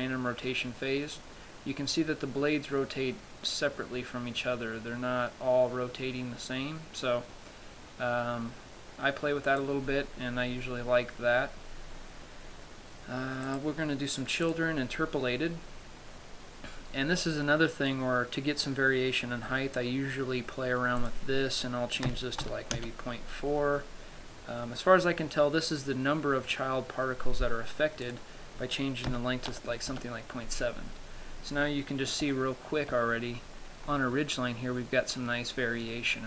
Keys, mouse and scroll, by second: 1.5 click, 10.9-12.5 scroll down 9, 13.7 click, 13.7 scroll down 4, 14.9 click, 16.9 scroll down 1, 17.5-19.5 scroll down 4, 21.6 click, 28.5 click, 32.0-32.7 scroll up 2, 32.7 shift+middle click, 33.6-34.2 scroll up 1, 34.2 scroll up 1.